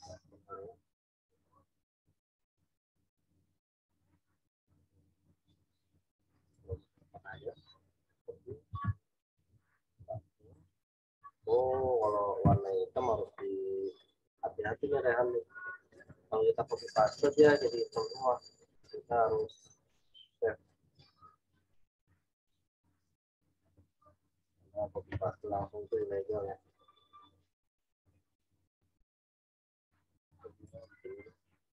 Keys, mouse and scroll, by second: 0.8 scroll up 1, 2.9 scroll down 1, 5.3 scroll up 1, 6.5 right click, 8.1 click, 9.1 alt+Tab, 9.9 ctrl+v, 11.5 click, 15.9 right click, 19.5 click, 22.9 click, 25.9 click, 30.6 right click.